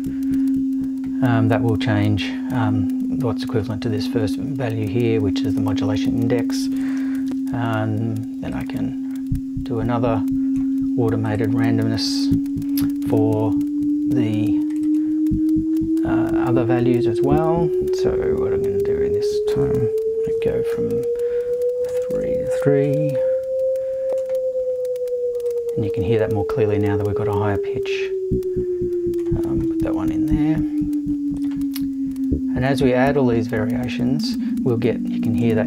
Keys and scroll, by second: 7.3 super+v, 20.7 3, 21.9 Right, 22.8 BackSpace, 23.1 3.